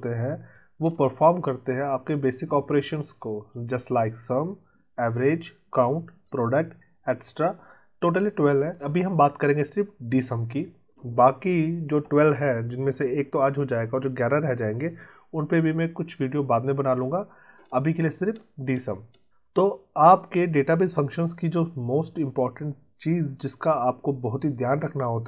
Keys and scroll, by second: 0.7 alt+Tab.